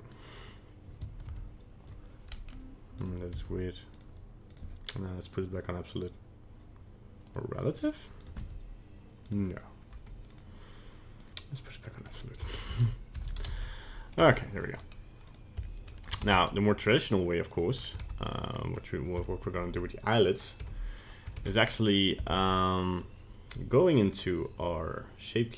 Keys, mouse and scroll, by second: 1.5 ctrl+z, 2.4 middle click, 2.5 middle click, 3.0 right click, 3.4 r, 4.6 right click, 5.3 click, 8.2 right click, 8.5 r, 10.3 right click, 11.2 click, 12.4 a, 13.2 alt+r, 13.4 alt+g, 13.6 alt+s, 14.3 Tab, 14.8 middle click, 15.3 right click, 15.7 shift+middle click, 16.2 ctrl+Tab, 17.5 right click, 17.8 scroll up 1, 18.0 ctrl+Tab, 18.3 right click, 18.6 middle click, 19.3 shift+middle click, 20.7 Tab, 21.4 ctrl+Tab, 22.3 ctrl+Tab, 24.3 right click, 25.2 click.